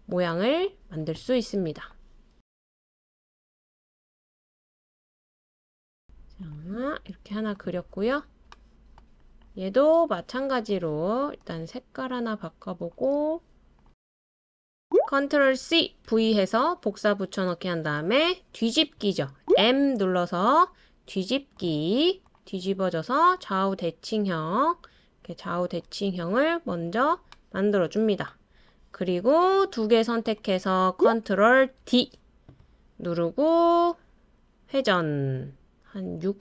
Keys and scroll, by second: 15.6 super+c, 16.1 super+v, 19.5 m, 31.8 super+d.